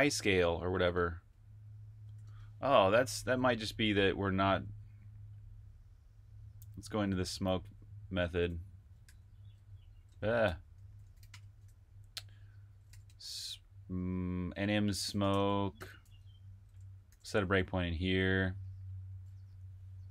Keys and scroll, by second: 2.1 super+Tab, 6.7 super+Tab, 8.9 typing, 10.3-11.1 typing, 12.5-13.2 typing, 14.6-20.1 typing, 17.7 super+\.